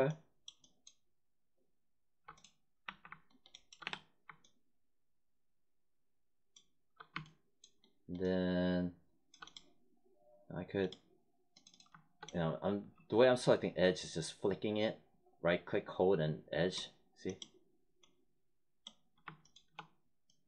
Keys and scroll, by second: 2.8 1, 3.8 3.